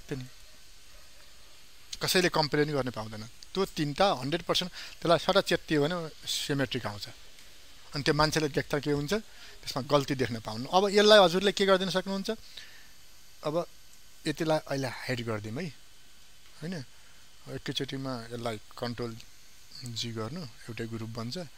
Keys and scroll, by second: 19.9 ctrl+g.